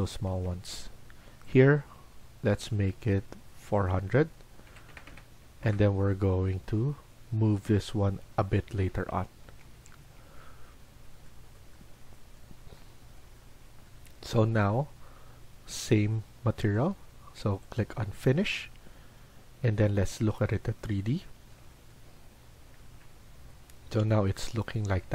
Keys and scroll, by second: 0.2 Escape, 0.4 Escape, 4.3-5.3 typing, 5.6 Return, 9.4 Escape, 9.7 Escape, 9.9 Escape, 11.7 Escape.